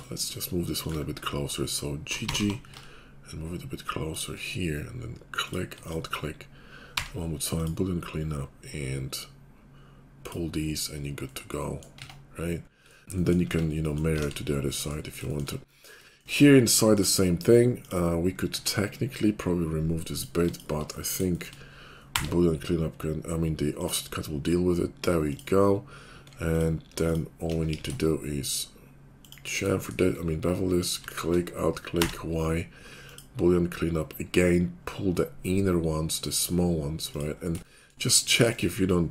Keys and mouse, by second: 2.2 g, 2.7-4.2 shift+drag, 5.3 click, 5.7 alt+click, 7.0 y, 12.0 Tab, 13.4 Tab, 14.1 alt+x, 14.2-17.7 middle drag, 17.7 click, 17.8 middle click, 18.5 Tab, 20.1 click, 20.2-21.2 alt+middle drag, 21.2 shift+click, 21.5-25.3 middle drag, 22.1 y, 25.3 click, 25.4 middle click, 26.5 alt+click, 27.7 ctrl+b, 29.6 shift+click, 31.1-38.3 alt+drag, 32.0 y, 38.3-39.1 shift+middle drag.